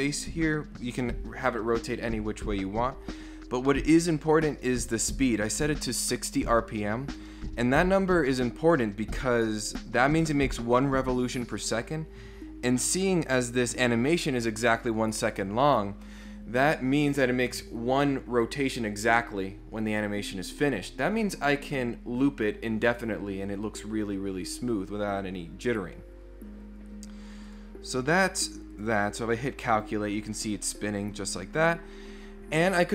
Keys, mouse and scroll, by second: 2.7-3.4 scroll up 3, 3.7 middle click, 3.7 scroll down 2, 5.1 click, 27.4 click, 28.7 click.